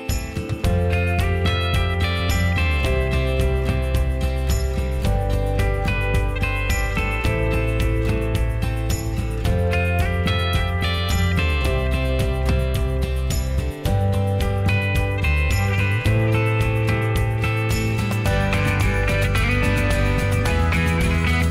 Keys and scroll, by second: 7.5 Escape, 8.1 Escape, 8.3 Escape, 8.5-9.3 Escape, 12.4 ctrl+v, 12.5 Return, 19.6 ctrl+a.